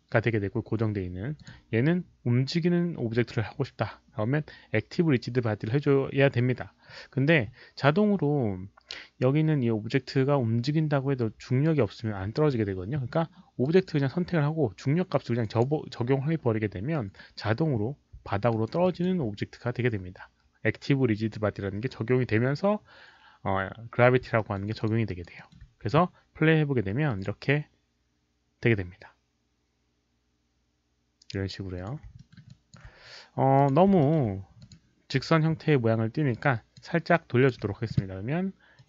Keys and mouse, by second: 1.3 click, 5.1 click, 13.6 click, 15.4 click, 18.1 click, 18.2 alt+middle click, 18.5 alt+right click, 18.8 alt+click, 20.8 alt+middle click, 24.3 alt+middle click, 24.7 alt+click, 25.0 alt+right click, 25.3 alt+middle click, 25.8 q, 26.3 alt+middle click, 26.3 alt+right click, 26.3 alt+click, 27.1 alt+click, 27.1 alt+middle click, 27.1 alt+right click, 27.1 q, 31.7 alt+click, 32.1 alt+middle click, 32.3 alt+q, 32.3 alt+right click, 32.4 alt+click, 32.7 alt+q, 32.7 alt+right click, 33.5 alt+click, 34.0 alt+middle click, 34.1 alt+q, 34.1 alt+right click, 34.6 click, 34.7 alt+middle click, 34.7 alt+right click, 34.7 q, 35.2 e, 36.3 alt+click, 36.7 alt+middle click, 37.1 alt+click, 37.1 alt+middle click, 37.2-38.1 typing, 37.4 alt+middle click, 38.7 click.